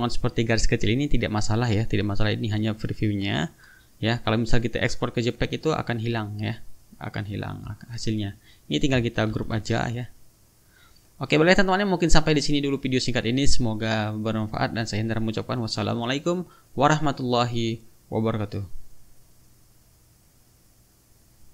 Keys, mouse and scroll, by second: 3.2 shift+-, 4.8-5.8 drag, 7.3 click, 7.7 click, 9.3 ctrl+g, 10.0 ctrl+click, 10.5 ctrl+click, 12.1 click, 21.4 click.